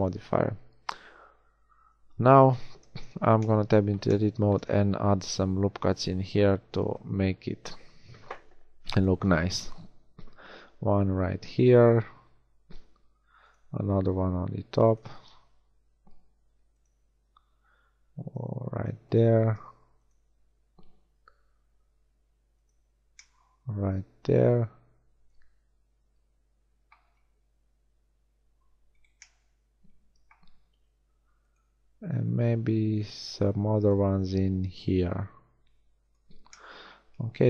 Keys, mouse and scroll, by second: 2.4 Tab, 5.2 ctrl+r, 7.1 shift+r, 8.2 ctrl+r, 11.9 ctrl+r, 15.2 ctrl+r, 19.4 ctrl+r, 27.2 ctrl+r, 29.0 right click, 30.6 ctrl+r, 34.1 ctrl+r.